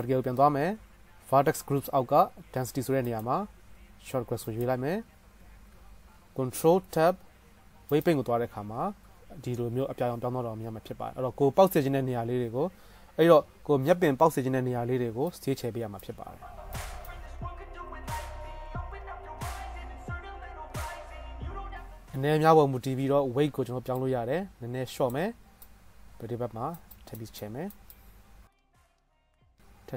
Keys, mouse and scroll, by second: 0.2-1.1 drag, 3.1 click, 6.8 ctrl+Tab, 8.7 middle click, 8.9 middle click, 12.2-15.4 drag, 15.4-18.3 middle drag, 18.3-20.3 drag, 20.3 middle click, 20.4 click, 20.5 middle click, 20.6 click, 20.7 middle click, 21.0 KP_0, 21.7 shift+middle click, 25.6-28.0 drag, 27.8 middle click, 27.8 right click, 28.1 click, 28.1 middle click, 28.1 right click, 28.5-29.9 middle drag.